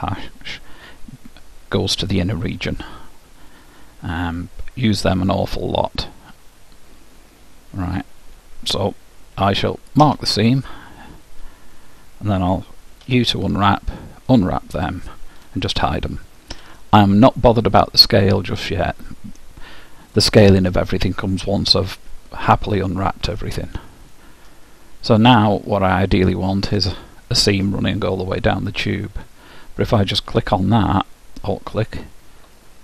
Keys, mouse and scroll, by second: 13.0 u, 16.6 h, 17.8-19.8 middle drag, 25.3-26.8 drag, 25.8-27.6 middle drag, 31.8-32.8 drag, 32.6-32.8 middle drag.